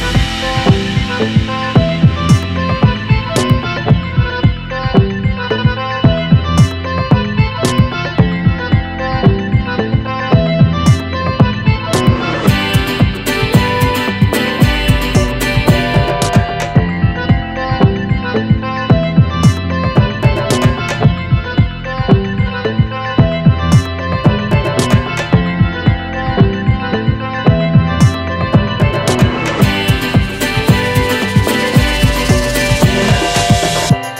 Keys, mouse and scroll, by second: 1.7 shift+click, 3.9 click, 4.0-5.6 drag, 6.1-7.6 drag, 10.7 click, 12.3-13.7 drag, 14.2-15.9 drag, 18.0 shift+click, 19.7 click, 21.3 click, 21.5-22.8 drag, 23.3-26.1 drag, 27.1-30.6 drag.